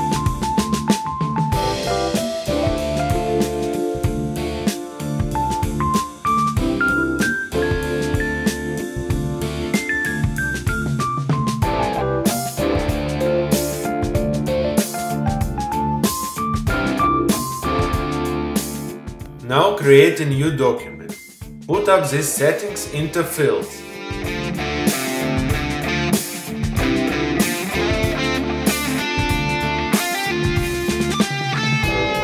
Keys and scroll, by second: 1.7 space.